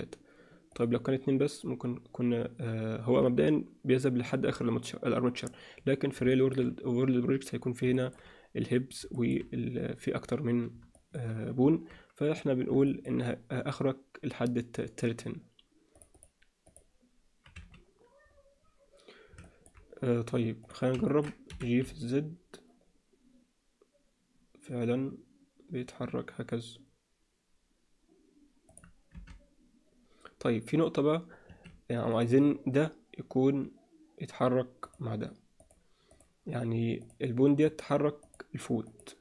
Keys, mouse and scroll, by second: 0.7 drag, 6.3 shift+middle drag, 7.9 shift+middle click, 9.1 shift+middle click, 10.9 shift+middle drag, 12.9 alt+shift+middle click, 16.1 click, 16.6 click, 17.5 z, 19.4 alt+shift+middle click, 21.0 ctrl+alt+middle click, 21.4 g, 29.1 r, 32.1 click, 34.9 click, 36.1 click, 38.2 click, 38.9 click.